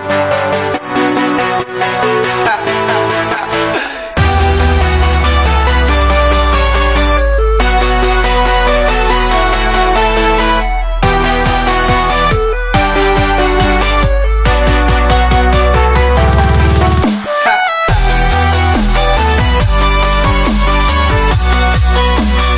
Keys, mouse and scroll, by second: 0.7 click, 1.3-2.8 middle drag, 2.8 click, 2.8 a, 3.6-6.1 middle drag, 6.5 Tab, 7.1-8.7 drag, 9.8-11.0 middle drag, 11.1 click, 12.7 middle click, 13.3 click, 14.1 middle drag, 14.3 click, 14.5 Tab, 14.9-15.9 middle drag, 15.9 a, 16.4 ctrl+b, 17.9 Tab, 18.6 ctrl+a, 19.2-20.0 right drag, 20.0 Tab, 20.7 ctrl+b, 21.9-22.5 middle drag.